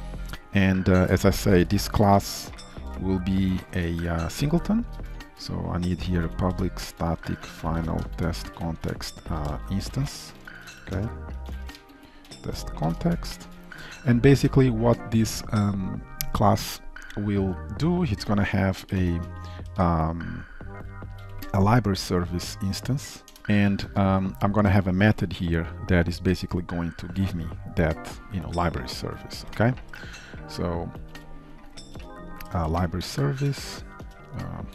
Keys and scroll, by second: 3.0 Return, 4.1 ctrl+shift+F12, 4.9 shift+Return, 5.4 ctrl+s, 6.9 Return, 13.1 ctrl+shift+Return, 13.5 ctrl+s, 19.2 Return, 23.4 ctrl+s, 31.9 Return.